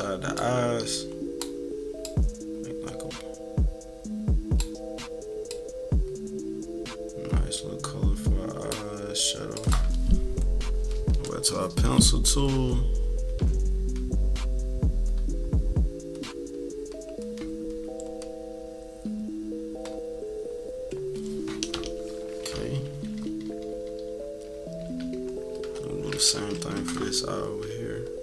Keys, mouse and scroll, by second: 0.3-1.4 drag, 2.0-4.6 drag, 5.4-8.6 drag, 9.5 click, 11.2 click, 12.4-20.9 drag, 22.4-26.3 typing, 24.1 scroll down 1, 26.1 click, 26.4 middle click, 26.5 scroll down 1, 26.8 middle click, 28.0-28.2 drag.